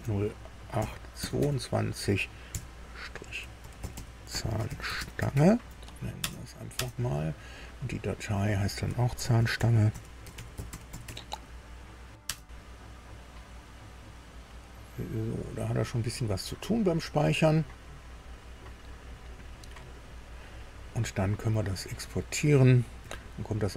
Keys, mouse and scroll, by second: 0.0-1.3 typing, 2.4 KP_Subtract, 3.3-5.8 typing, 6.1 Return, 6.7 Return, 8.3 click, 8.9-11.5 typing, 12.2 Return, 22.1 click, 22.9 ctrl+e.